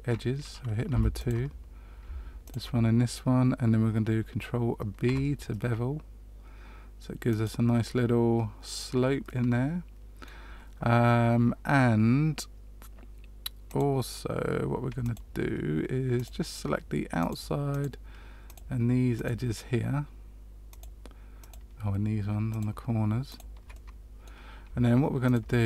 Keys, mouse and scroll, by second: 1.1 click, 1.1 2, 2.4 shift+click, 5.0 ctrl+b, 9.2 middle click, 13.6 click, 15.0 shift+click, 16.1 click, 17.1 shift+click, 17.6 shift+click, 18.4 shift+click, 19.1 shift+click, 20.6 shift+click, 21.3 shift+click, 22.4 shift+click, 23.2 shift+click, 23.7 middle click, 25.2 shift+click.